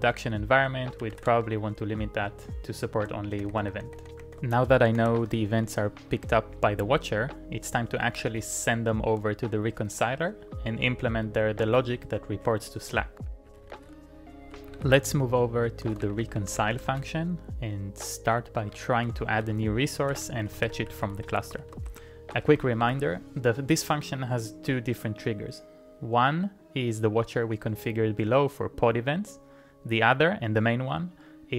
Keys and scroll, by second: 0.7-1.7 typing, 3.3 shift+Tab, 3.5 shift+Tab, 3.7 shift+Tab, 4.0 shift+Tab, 4.2 shift+Tab, 4.6-5.5 typing, 8.3-17.5 typing, 10.1 ctrl+o, 10.2 Return, 10.4 ctrl+o, 18.7-24.7 typing.